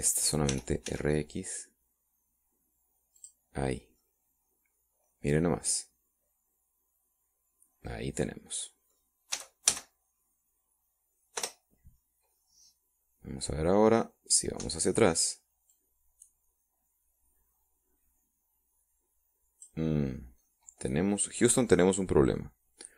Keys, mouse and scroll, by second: 0.6 right click, 1.5 r, 1.9 x, 4.2 click, 4.6 middle click, 5.0-10.1 middle drag, 10.3 a, 12.4 Return, 16.7-20.8 drag, 21.1 scroll down 1, 21.5-22.6 middle drag.